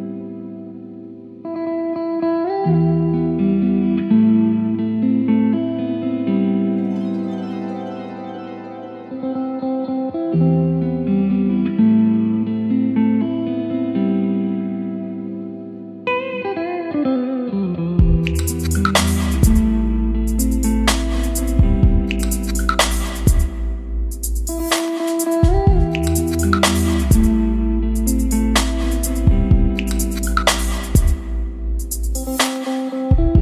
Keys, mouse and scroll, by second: 0.4 Down, 0.6 Return, 1.7 space, 2.0 space, 4.1-5.1 drag, 5.4 ctrl+c, 5.6 Right, 5.9 Return, 6.1 ctrl+v, 7.0 click, 7.4-8.8 typing, 8.9 Return, 10.5 click, 12.2 ctrl+s, 14.5 click, 15.5 ctrl+space, 20.5 ctrl+click, 20.6 ctrl+click, 21.3 ctrl+o, 21.5 ctrl+n, 21.6 ctrl+r, 21.8 ctrl+e, 21.9 ctrl+l, 22.0 ctrl+a, 22.5 ctrl+Return, 22.9 ctrl+space, 24.4 ctrl+s, 25.0 scroll, 25.0-27.5 middle drag, 27.5-32.3 drag, 32.3 Tab.